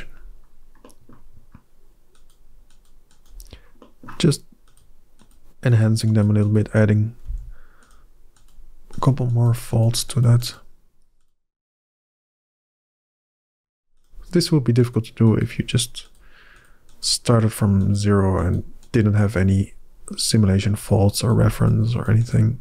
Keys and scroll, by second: 7.1 f, 13.4 f.